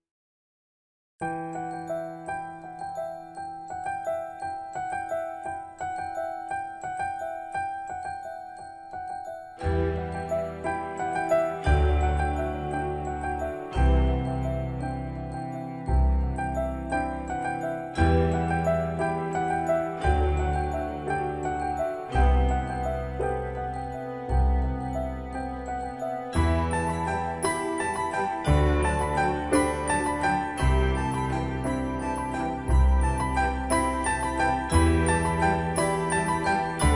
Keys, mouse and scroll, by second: 3.5 click, 7.1-7.7 scroll up 1, 7.7 middle click, 8.2-8.6 scroll up 1, 9.9-12.5 typing, 12.9 middle click, 13.7-14.9 scroll down 1, 14.9 typing, 15.8 Escape, 16.3-16.6 typing, 18.0 typing, 18.1-21.0 drag, 21.3-21.9 scroll down 1, 21.9 middle click, 22.6-24.4 scroll up 1, 27.0-36.9 drag.